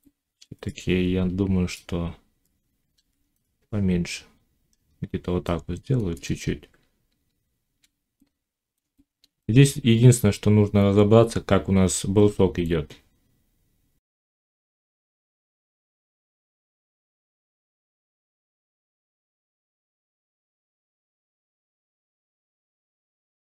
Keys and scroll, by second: 2.8 alt+s, 6.6 z, 15.4 Tab, 17.6 Tab, 20.1 Tab, 21.0 shift+Tab, 22.3 g.